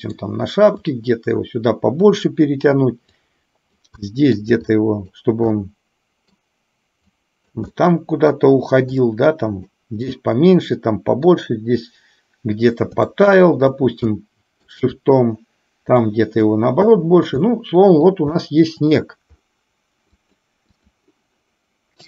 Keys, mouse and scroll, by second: 0.8-2.0 drag, 3.3 click, 4.0 middle click, 4.8 shift+click, 5.6 middle click, 7.1 click, 7.9 middle click, 9.0 click, 10.3-11.4 middle drag, 13.1 shift+click, 14.1 middle click, 16.1 click, 17.5 middle click, 18.4 shift+middle click, 20.1 click.